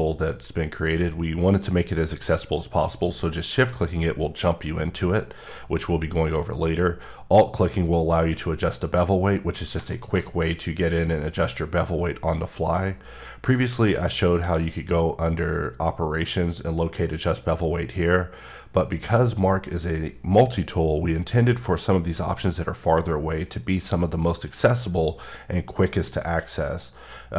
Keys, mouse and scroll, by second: 9.9 click, 13.8 right click.